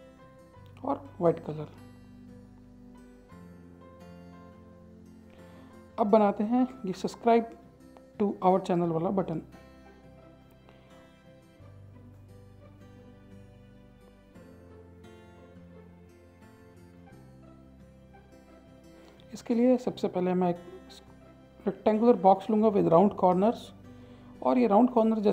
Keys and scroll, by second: 6.9 Return, 12.7 Delete, 13.2 Return, 15.6 BackSpace.